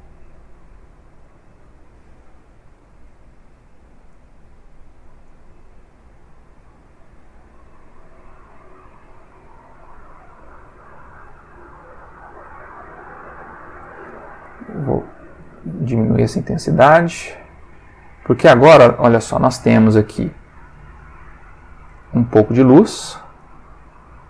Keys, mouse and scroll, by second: 0.2-1.0 drag, 1.2 click, 2.2-2.9 drag, 3.0-3.9 drag, 4.1-5.0 drag, 5.2-5.8 drag, 6.6-11.3 drag, 11.7 click, 12.6 click, 14.4-15.1 drag, 15.4 click, 16.2-16.7 drag, 17.5 click, 20.7 click, 22.4 click, 23.4-24.2 drag.